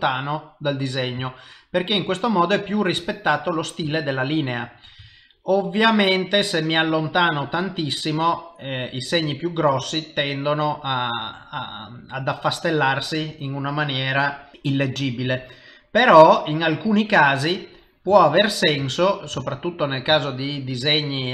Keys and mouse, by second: 1.3 ctrl+middle click, 4.0 shift+middle click, 4.6 shift+middle click, 5.2 ctrl+middle click, 5.8 ctrl+middle click, 6.9 ctrl+middle click, 7.3 ctrl+middle click, 7.6 s, 7.8 ctrl+middle click, 8.3 ctrl+middle click, 8.9 ctrl+middle click, 9.4 middle click, 11.2-11.7 shift+middle click, 12.1 middle click, 14.5 click, 16.0 click, 16.9 click, 18.4 ctrl+middle click, 18.9 shift+middle click, 19.4 ctrl+middle click, 20.2 shift+middle click, 20.9 middle click.